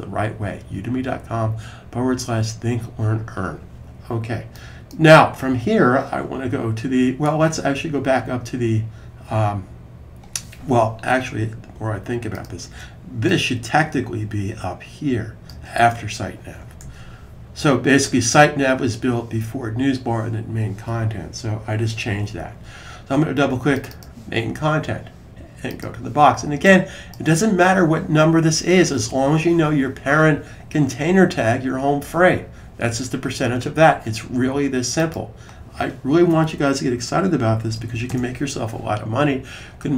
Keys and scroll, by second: 16.6 super+s, 36.6-38.3 typing.